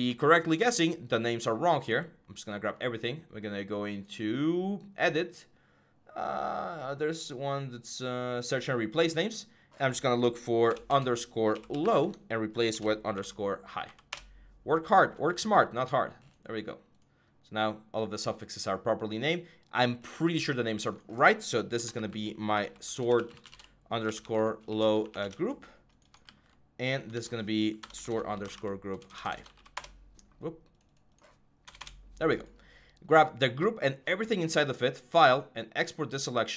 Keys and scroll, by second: 10.5-14.2 typing, 21.5-25.4 typing, 26.1 ctrl+c, 26.9 ctrl+v, 27.6-30.0 typing, 31.5 BackSpace, 31.6 Return.